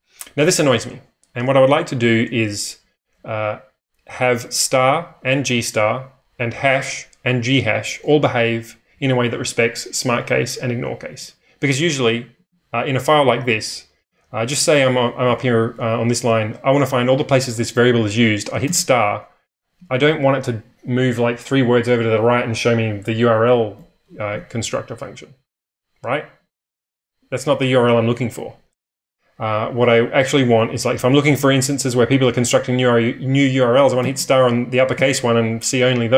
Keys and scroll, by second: 12.1 space, 12.3 n, 13.3 k, 14.9-15.8 typing, 18.6 shift+8, 34.0 shift+8, 34.9 n.